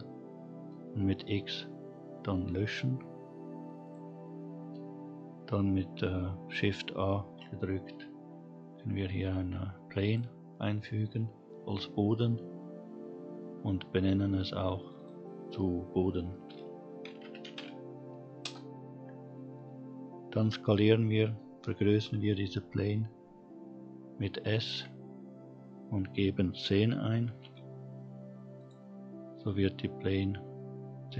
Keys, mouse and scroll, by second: 0.0 x, 5.8 shift+a, 9.8-12.8 scroll up 1, 13.5 click, 13.6-17.1 drag, 23.4 s, 27.7-28.4 scroll down 2, 28.4-30.0 scroll down 2.